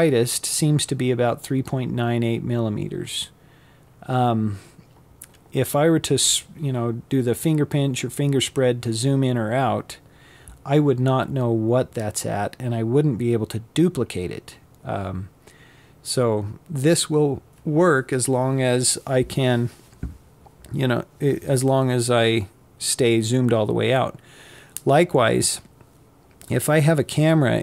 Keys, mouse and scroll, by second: 0.8 click, 27.0 click.